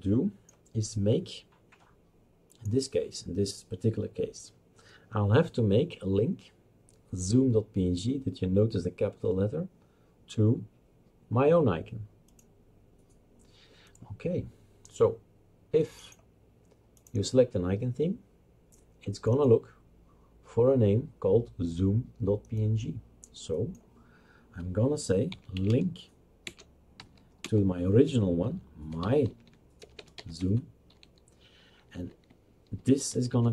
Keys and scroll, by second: 25.3-27.4 typing, 28.7-30.1 typing, 30.5 Tab, 32.5-33.5 typing.